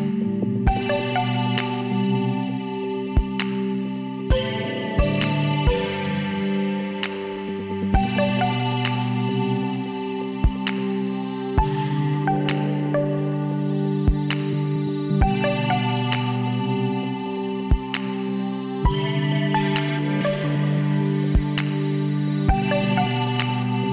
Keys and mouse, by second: 5.0 alt+h, 5.7 a, 8.7 Tab, 10.6 click, 11.5-14.0 middle drag, 14.0 KP_7, 18.0 middle click, 18.8-20.4 middle drag, 20.4 Tab, 21.0 Tab, 21.4-23.0 drag, 23.4-23.9 drag.